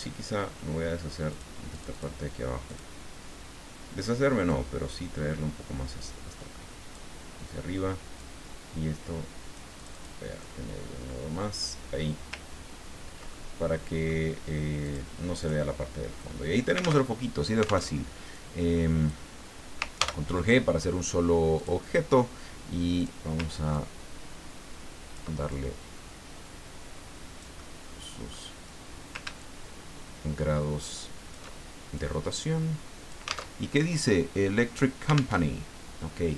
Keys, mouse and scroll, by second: 0.1 ctrl+scroll down 2, 0.1 ctrl+scroll up 2, 0.3-1.1 ctrl+scroll down 2, 1.3 click, 1.7 click, 2.7 click, 4.5-7.0 drag, 8.2-9.7 drag, 9.9 click, 10.4-11.9 drag, 12.5-13.0 ctrl+scroll down 2, 13.3-14.3 ctrl+drag, 14.8 click, 15.4 click, 17.0 alt+Tab, 17.9 alt+Tab, 18.4 click, 19.9 ctrl+g, 21.5 click, 23.0 click, 23.7-25.2 ctrl+drag, 25.5-28.4 ctrl+drag, 27.6 right click, 29.4-31.5 ctrl+shift+drag, 32.0-33.5 drag, 33.5 alt+Tab, 35.3 alt+Tab.